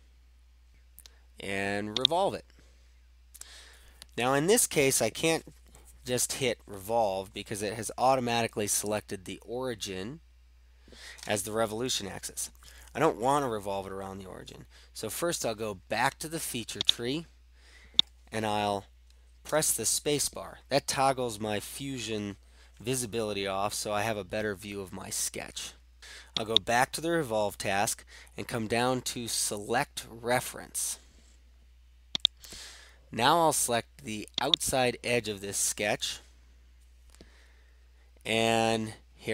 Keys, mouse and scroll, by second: 2.0-3.3 drag, 16.9-19.4 drag, 26.6 click, 32.2-33.5 drag, 34.6-35.8 drag.